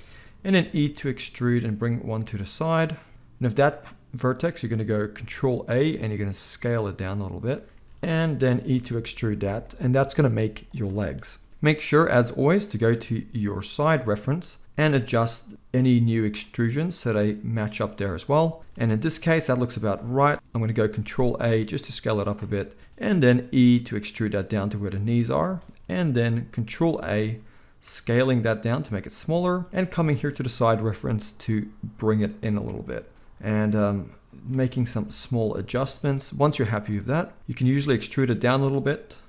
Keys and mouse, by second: 0.5 e, 3.0 z, 5.6 ctrl+a, 7.7-33.1 ctrl+middle drag, 7.9 ctrl+z, 8.6 e, 14.8 g, 21.3 ctrl+a, 23.4 e, 26.9 ctrl+a, 31.4 g, 33.1-34.5 drag, 33.4 g, 34.5-36.2 middle drag, 36.2-38.9 drag, 37.7 e, 38.9-39.2 middle drag.